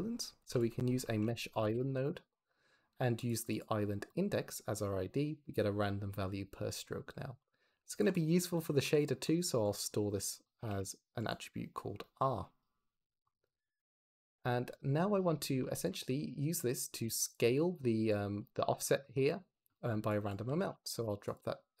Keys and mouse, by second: 0.3 shift+a, 7.8 shift+a, 10.5 click, 13.2 click, 14.7 click, 15.7 ctrl+shift+click, 16.6 click, 17.2 click, 17.4 x, 18.0 click, 19.0-20.4 drag.